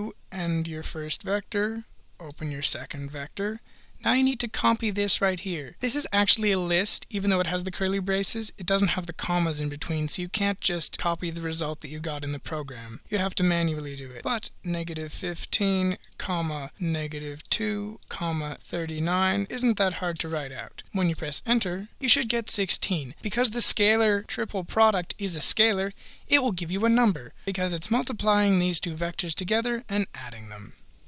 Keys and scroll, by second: 1.1 ), 3.2 (, 15.1 1, 15.5 5, 16.1 ,, 17.5-19.5 typing, 21.2 Return.